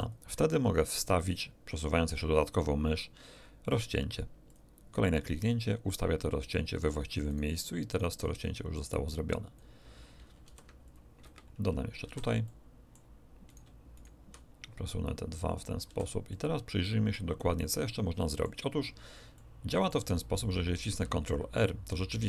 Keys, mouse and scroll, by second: 4.5 click, 7.3 shift+right click, 8.7-9.7 shift+drag, 10.4 ctrl+r, 10.8 ctrl+click, 11.2 Escape, 12.0 a, 12.4 ctrl+click, 13.5 ctrl+shift+middle click, 13.9 ctrl+shift+click, 14.6 ctrl+shift+click, 14.9 shift+middle click, 15.1 click, 15.1 middle click, 15.8 a, 16.3-17.3 middle drag, 17.9 middle click, 19.3 middle click, 20.7 ctrl+r.